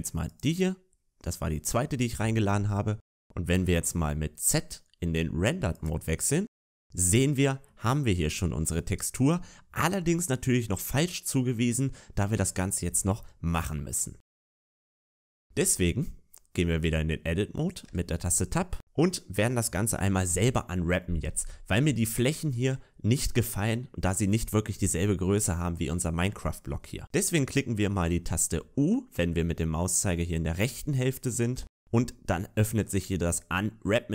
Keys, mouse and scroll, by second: 5.9 z, 6.4 Tab, 7.7 middle click, 12.6 middle click, 14.5-15.2 scroll down 2, 14.8 shift+middle click, 15.2 scroll up 1, 15.4 middle click, 17.8 Tab.